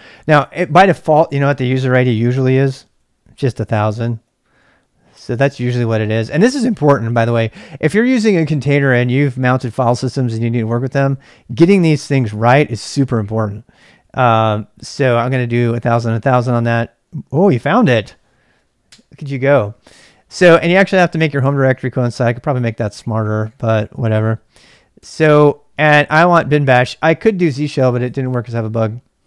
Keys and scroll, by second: 3.0-4.7 typing, 5.1 Return, 13.6-15.1 typing, 18.8 Return, 20.4-24.2 typing, 24.9 Return.